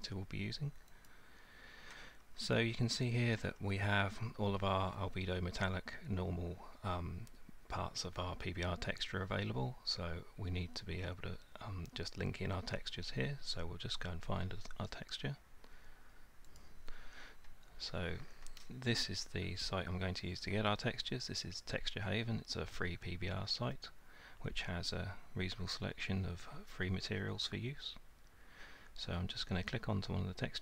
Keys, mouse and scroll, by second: 1.1 click, 2.2-2.7 scroll down 3, 3.4-4.0 scroll down 3, 7.9 scroll, 16.6 click.